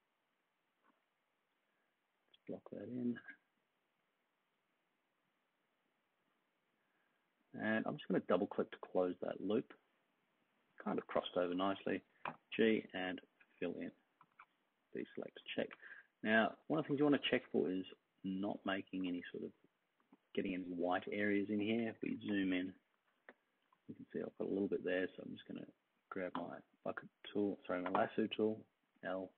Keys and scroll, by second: 12.2 g, 14.3 super+d, 15.7-16.8 space, 17.8-21.8 space, 21.7 super+=, 21.9 super+=, 22.0 super+=, 22.7-23.7 space, 26.3 g, 27.8 l.